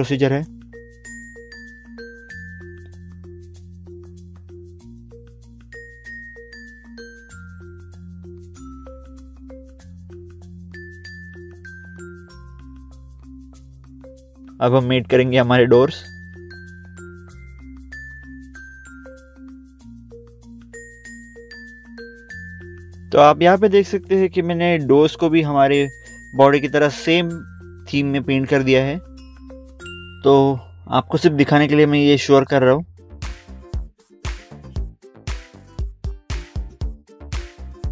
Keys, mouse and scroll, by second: 0.0 click, 0.3 scroll up 1, 0.6 middle click, 0.7 middle click, 0.8 scroll down 1, 1.1 click, 1.2 scroll up 1, 1.4 middle click, 1.6 scroll down 1, 1.7 middle click, 1.7 scroll up 1, 1.8 scroll down 1, 2.3 click, 2.6 scroll up 1, 2.7 middle click, 3.0 middle click, 3.1 scroll down 1, 3.5 scroll up 1, 3.7 middle click, 3.8 middle click, 3.9 scroll down 1, 4.3 click, 4.6 scroll up 1, 4.7 middle click, 5.0 middle click, 5.0 middle click, 5.1 scroll down 1, 5.6 click, 5.7 scroll up 1, 5.9 middle click, 5.9 middle click, 6.0 scroll down 1, 6.5 click, 7.0 right click, 7.3 scroll up 1, 7.5 middle click, 7.8 scroll down 1, 8.0 click, 8.1 click, 8.6 click, 8.7 click, 9.0 middle click, 9.4 scroll up 1, 10.3 middle click, 12.4 middle click, 12.6 scroll down 1, 13.8 middle click, 14.2 middle click, 15.2 click, 18.4 scroll down 1, 20.0 click, 20.2 click, 20.4 click, 22.3 click, 23.3 scroll down 1, 25.1 scroll up 1, 25.7 scroll down 1, 26.2 scroll up 1, 26.4 scroll down 1, 28.4 click, 29.5 scroll down 1, 30.3 click, 32.2 click, 32.3 scroll up 1, 32.5 scroll down 1, 32.7 scroll up 1, 32.7 scroll down 1, 33.5 click, 35.2 click, 35.4 scroll up 1, 36.0 click, 36.3 scroll up 1, 37.5 scroll down 1.